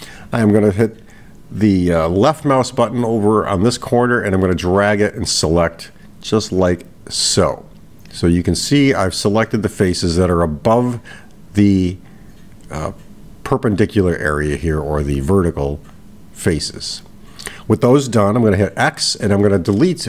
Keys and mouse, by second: 3.9-10.0 drag.